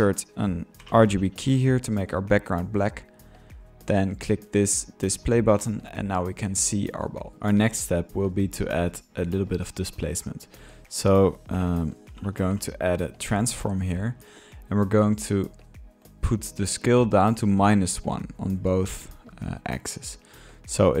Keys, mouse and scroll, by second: 1.2-1.9 typing, 1.8-2.1 drag, 2.7-3.1 drag, 3.2-5.1 middle drag, 5.1 click, 5.2 drag, 5.6-7.4 middle drag, 7.6 ctrl+click, 9.0-9.7 drag, 10.3-11.8 drag, 11.8 Tab, 11.9 click, 12.6-13.4 typing, 13.4-14.0 drag, 14.3-19.5 middle drag, 20.0 click, 20.6-21.0 drag.